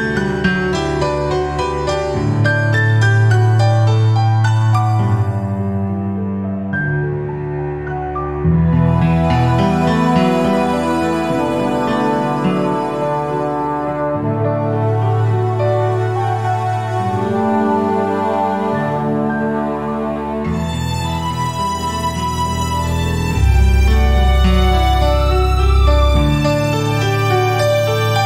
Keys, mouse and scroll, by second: 1.4 click, 2.6-3.2 typing, 4.6 click, 6.0 typing, 7.2 click, 7.4 typing, 9.4-9.9 scroll up 1, 11.0 typing, 12.4 click, 15.6 click, 18.3 click, 20.8 right click, 21.5 click, 25.9 click, 26.4 typing, 27.4 click, 27.4 typing.